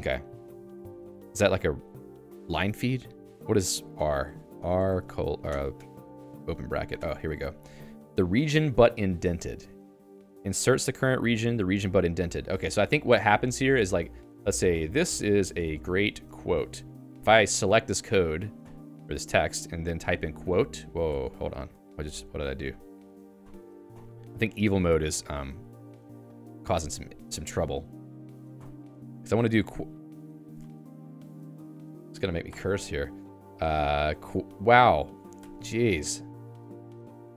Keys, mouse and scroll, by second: 12.2 Return, 12.6 Escape, 12.9-17.3 typing, 20.2 u, 20.6 q, 21.1 Escape, 21.2 Escape, 21.9 ctrl+g, 22.0 ctrl+g, 22.3 ctrl+g, 22.5 ctrl+g, 22.7 ctrl+g, 23.2 ctrl+g, 23.4 i, 24.6 Escape, 25.6 ctrl+g, 25.9 i, 26.7 Escape, 27.1 shift+v, 29.5 q, 30.0 u, 30.3 Escape, 30.4 Escape, 30.9 ctrl+g, 31.8 shift+v, 34.2 Down, 34.4 Down, 35.4 Escape, 37.0 i.